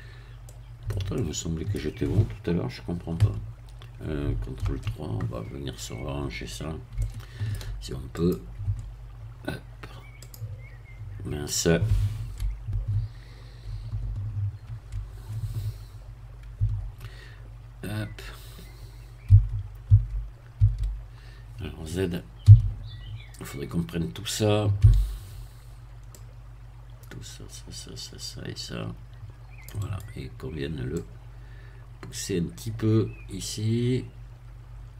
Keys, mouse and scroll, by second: 0.1-0.4 scroll up 2, 0.4-2.2 middle drag, 3.2 KP_1, 4.6 ctrl+KP_3, 5.5-7.0 scroll up 2, 7.0 shift+middle click, 8.2 click, 10.2 click, 14.6 ctrl+3, 16.6 Tab, 17.5-18.3 scroll up 2, 18.3-19.2 scroll up 1, 19.2 a, 20.6 a, 22.4 z, 24.8 c, 26.2-30.2 drag, 29.8 right click, 31.0-34.9 drag.